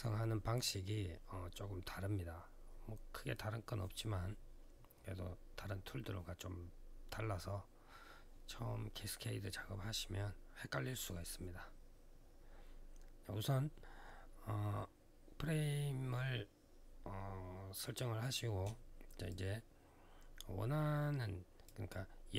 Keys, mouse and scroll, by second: 19.1 click.